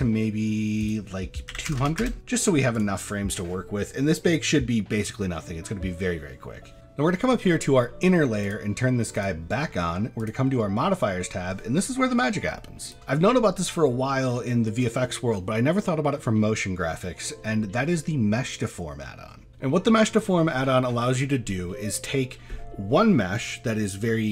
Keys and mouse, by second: 0.8-2.1 drag, 1.8 KP_0, 2.8-6.7 drag, 8.4 click, 9.1 click, 10.2 click, 12.9-19.5 drag, 21.5 middle drag, 22.0 shift+middle drag.